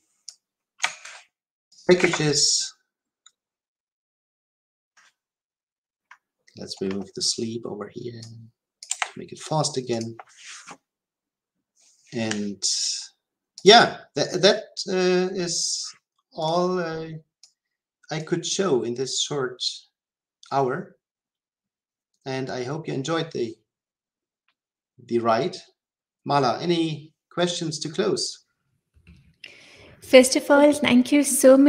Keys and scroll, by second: 0.9 ctrl+c, 8.8 Delete.